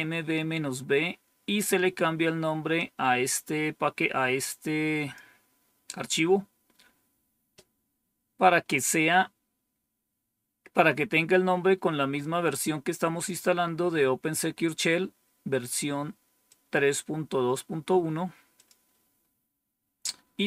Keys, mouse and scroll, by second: 2.7-5.1 drag, 12.1-13.2 drag, 16.4-17.5 drag, 18.5 click.